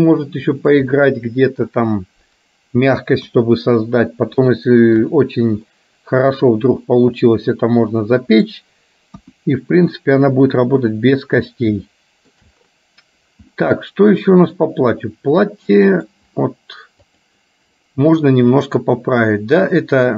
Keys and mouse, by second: 3.4 KP_1, 4.7 shift+middle click, 5.8 middle click, 7.4-8.6 middle drag, 9.3 KP_1, 11.9 shift+middle click, 13.6-16.1 middle drag, 17.2 click, 18.6-20.1 drag.